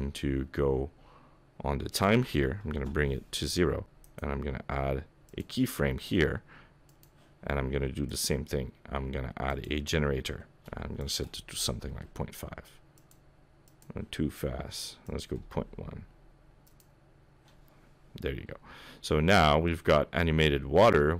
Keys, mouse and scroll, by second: 0.1-1.9 scroll up 11, 1.9 click, 1.9-2.9 scroll up 1, 4.0 right click, 6.9 click, 8.1 click, 11.0 click, 13.0 click, 13.7 click, 15.0 click, 16.7 click, 19.7 middle click.